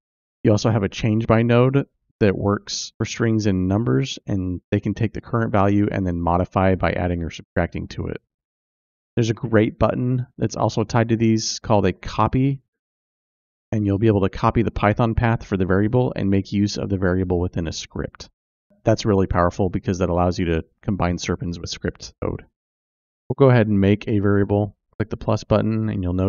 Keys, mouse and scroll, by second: 23.8 click.